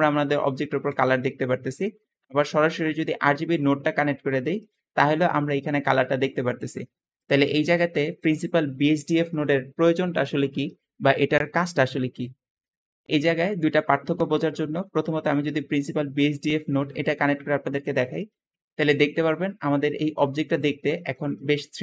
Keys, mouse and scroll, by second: 3.8 shift+click, 7.5 g, 15.7-16.7 drag, 19.8 g.